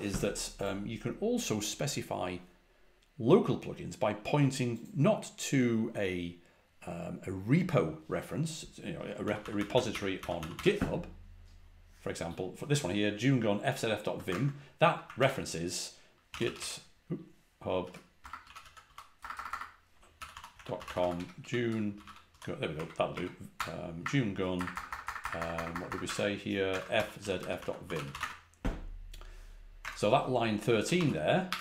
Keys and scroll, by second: 9.1-10.3 typing, 11.9 typing, 14.2 super+Tab, 15.1 super+t, 16.2-25.8 typing, 26.0 super+Tab, 26.6 super+Tab, 27.1-28.5 typing, 29.8 super+Tab, 30.9 shift+v.